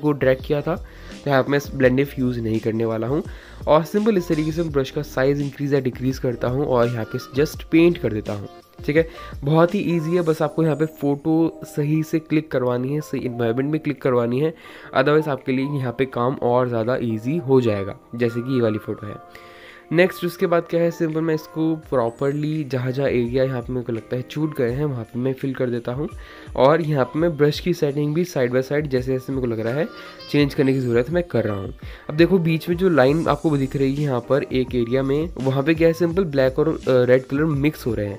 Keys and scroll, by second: 0.6 ctrl+z, 4.9 ctrl+z, 6.1-6.5 [, 14.3 ctrl+z, 15.5 ], 16.4 ctrl+z, 17.2 space, 19.4 ctrl+z, 27.0 [, 27.2 [, 27.3 [, 27.3 [, 31.1 ctrl+shift+z.